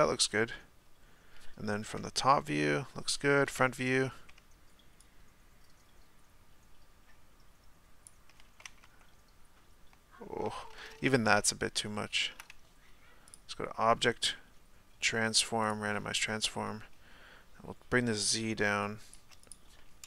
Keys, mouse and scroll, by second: 1.9 KP_7, 3.5 KP_1, 5.7-8.7 shift+drag, 8.7 Tab, 10.5 Tab, 15.7-20.0 drag.